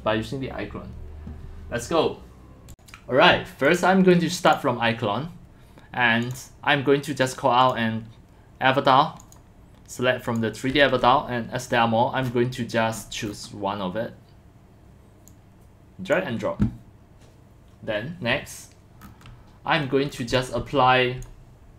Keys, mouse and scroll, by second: 3.7 click, 4.8 click, 6.3 click, 7.2 click, 7.6 click, 9.2 click, 10.2 scroll down 1, 10.3 click, 11.7 middle click, 12.3 middle click, 13.0 middle click, 13.0-13.5 scroll, 13.3 middle click, 13.4 middle click, 15.3 click, 19.0 middle click, 19.8 middle click, 20.3 x, 20.4 click, 20.6 c.